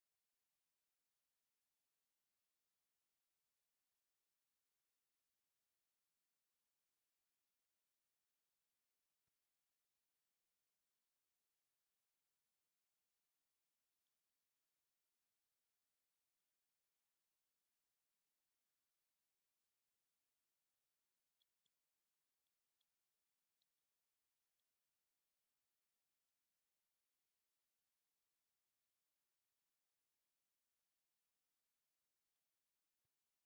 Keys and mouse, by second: 1.7 click, 2.3 BackSpace, 2.9 middle click, 4.1-7.7 drag, 8.4 click, 9.2 ctrl+shift+click, 10.5 click, 11.9-13.0 drag, 13.8 middle click, 14.6 ctrl+shift+click, 16.1 middle click, 17.0-20.3 drag, 21.2 middle drag, 22.3-22.6 middle drag, 23.4 middle click, 24.3 middle click, 25.3 ctrl+shift+click, 26.1 middle click, 27.0-31.1 shift+drag, 32.3 middle click, 33.2 ctrl+shift+click.